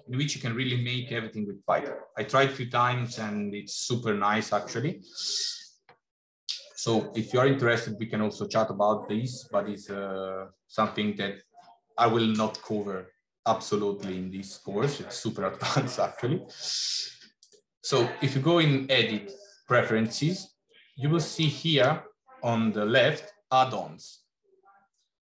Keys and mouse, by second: 17.4-20.5 drag.